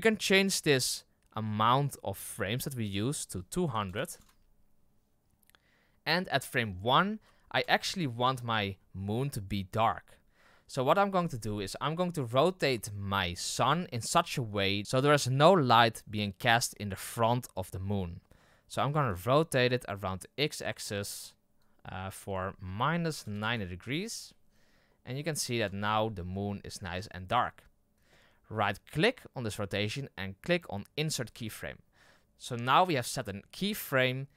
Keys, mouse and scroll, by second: 7.2 KP_2, 7.5 KP_0, 8.6-10.0 scroll up 4, 10.4-10.8 scroll down 5, 10.8 middle drag, 11.3-11.7 scroll down 3, 11.7-12.0 middle drag, 12.0-14.1 scroll up 3, 18.8 r, 21.6-24.8 drag, 24.8-25.5 middle drag, 25.5 KP_0, 26.1-26.9 scroll up 8, 26.9-28.9 scroll down 6, 31.2-34.3 right drag.